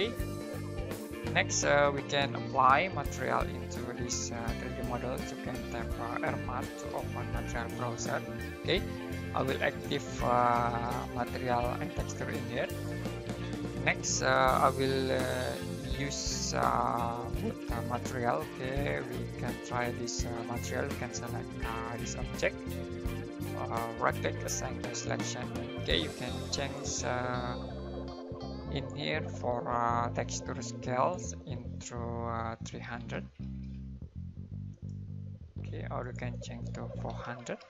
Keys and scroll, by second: 6.0-7.7 typing, 32.6-33.4 typing, 36.8-37.5 typing.